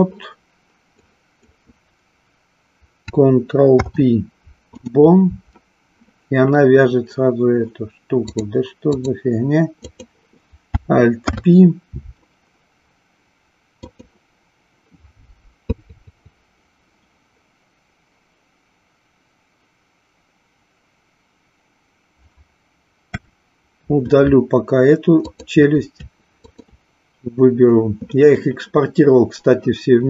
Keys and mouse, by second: 1.2 click, 3.7 ctrl+p, 8.3 click, 11.1 alt+p, 23.1 Delete, 25.2 click, 26.4 shift+click.